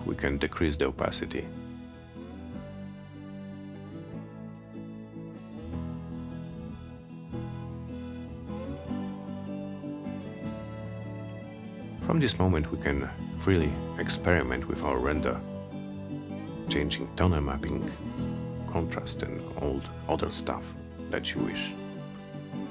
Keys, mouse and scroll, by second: 9.9 click, 13.6 click, 20.6-22.7 drag.